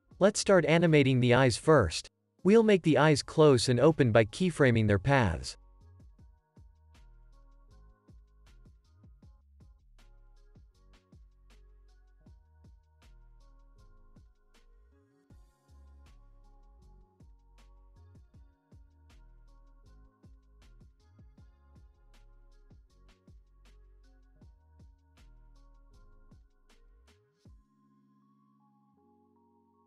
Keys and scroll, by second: 5.6 u, 10.0 ctrl+s, 14.7 u, 15.5 ctrl+s, 18.8 ctrl+s, 21.8 u, 24.6 ctrl+s, 27.0 space.